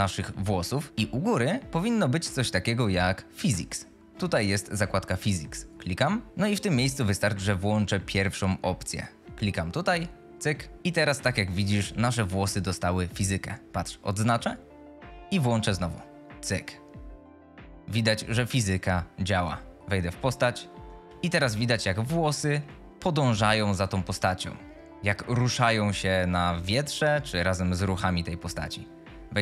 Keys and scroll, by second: 4.4 F2, 11.5 F22, 21.0-22.6 typing, 28.1 q.